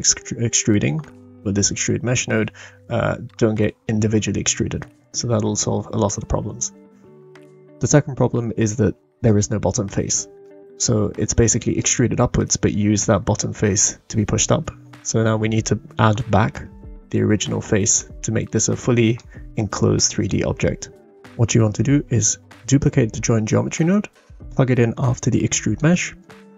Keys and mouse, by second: 8.4-9.3 middle drag, 10.4-11.8 middle drag, 17.9-19.2 middle drag, 22.7 shift+d, 25.3 click, 26.2 click.